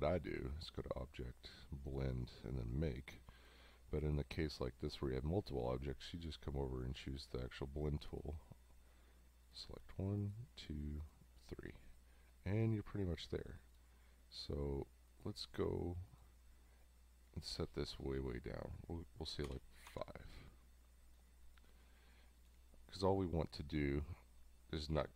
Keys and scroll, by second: 19.5 5.